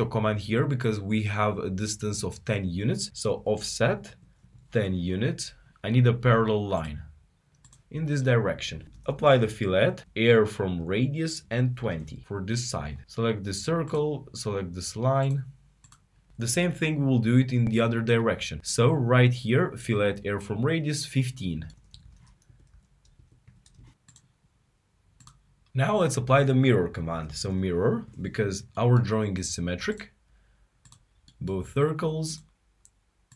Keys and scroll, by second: 12.6-13.3 typing.